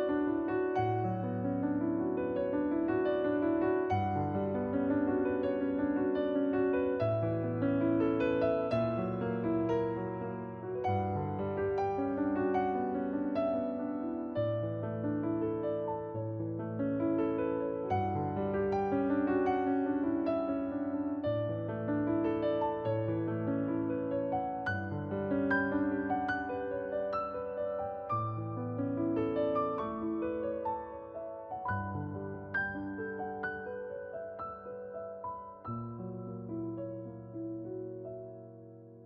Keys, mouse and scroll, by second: 0.0 click, 5.8-6.4 scroll down 1, 6.5 shift+2, 7.0 scroll up 1, 8.5 scroll down 1, 8.8-11.5 scroll up 1, 11.5 click, 31.4 right click, 31.7 alt+click, 34.8 scroll down 1, 35.8 click, 36.8 scroll down 1.